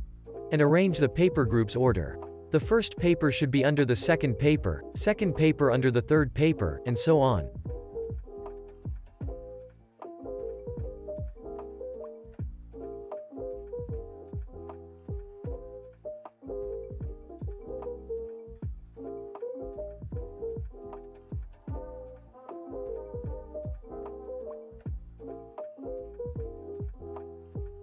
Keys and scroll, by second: 1.5 super+[, 2.1 super+s, 14.2 super+], 22.2 super+].